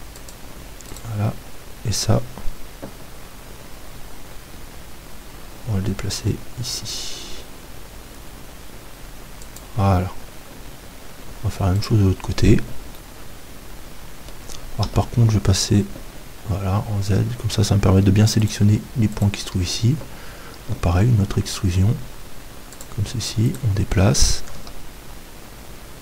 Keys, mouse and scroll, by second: 0.3-2.2 drag, 0.9-2.8 right drag, 5.6 g, 9.6-11.5 drag, 11.5 middle click, 11.9-14.8 right drag, 13.6-14.9 middle drag, 14.9 KP_7, 16.0 z, 18.0 middle click, 18.4-21.0 right drag, 20.7 e, 22.8-24.6 drag, 23.5-24.6 right drag, 24.6 g.